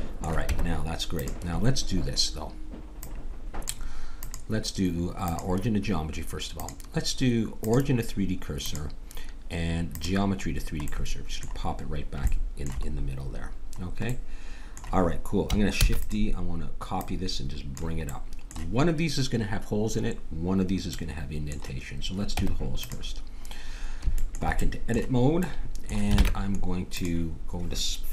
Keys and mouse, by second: 0.5 Tab, 2.9-6.2 drag, 6.5-8.5 drag, 8.6-10.5 drag, 10.5-14.2 middle drag, 15.8 shift+d, 16.9 click, 18.1 click, 20.9 middle click, 22.3 Tab, 26.2 ctrl+Tab.